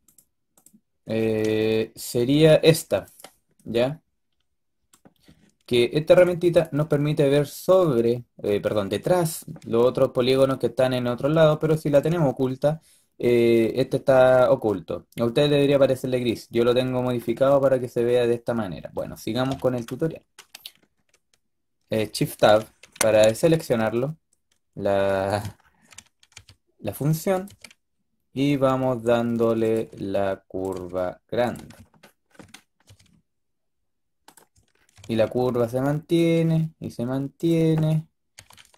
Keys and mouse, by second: 1.3 z, 6.0-9.0 drag, 11.8-13.9 drag, 17.2-19.4 drag, 19.4 KP_7, 19.9-22.3 middle drag, 22.3 shift+Tab, 23.2 g, 26.2 e, 27.3 e, 29.6 e, 30.6 e, 32.7 e, 34.9 e, 36.2 e, 38.3 e.